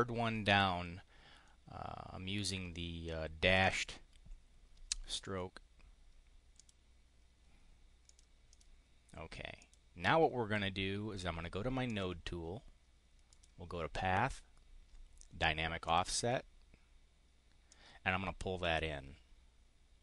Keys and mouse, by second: 3.5 click, 6.5 click, 7.9 click, 8.3 click, 9.4 click, 11.9 click, 13.3 click, 15.8 click, 17.7-20.0 drag.